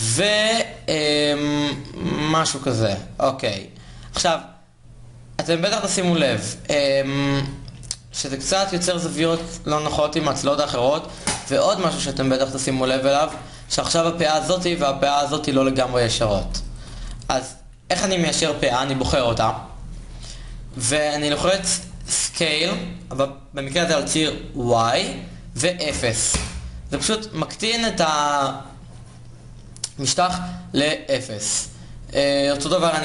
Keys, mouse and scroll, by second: 3.8-9.5 middle drag, 11.3 KP_1, 11.8 KP_3, 21.4 KP_3, 22.0 s, 32.9 s.